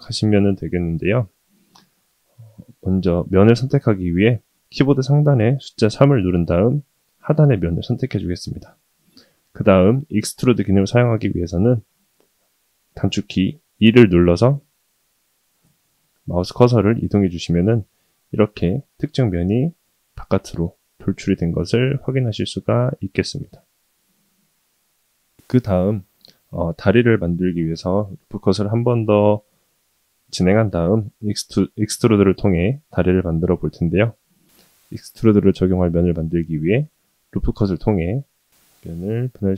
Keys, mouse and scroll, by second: 1.2 middle click, 3.5 middle click, 5.9 3, 6.9 click, 7.5-9.3 middle drag, 18.8-20.3 middle drag, 20.5-21.0 scroll up 2, 21.6-21.9 shift+middle drag, 22.2-25.3 middle drag, 26.1 shift+middle click, 26.8-29.1 middle drag, 34.2 ctrl+r.